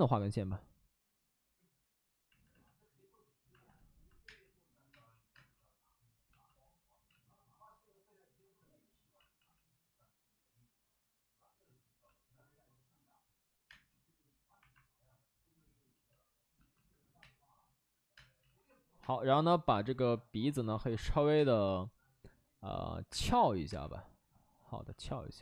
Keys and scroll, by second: 7.0 space, 8.6 ctrl+z, 9.1 ctrl+z, 9.3 ctrl+z, 13.6 space, 14.5 1, 17.1 3, 18.0 space, 18.3 ctrl+z, 18.9 space, 19.2 ctrl+z, 21.3 space, 23.0 space, 23.6 1, 24.8 1.